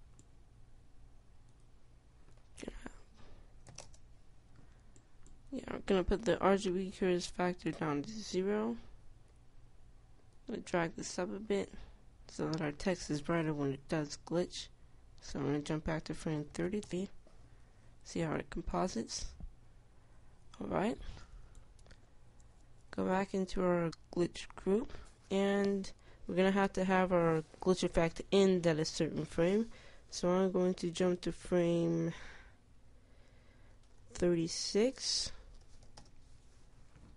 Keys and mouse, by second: 9.3 i, 14.4 Tab, 17.3 KP_3, 24.4 Tab, 26.1-30.3 middle drag.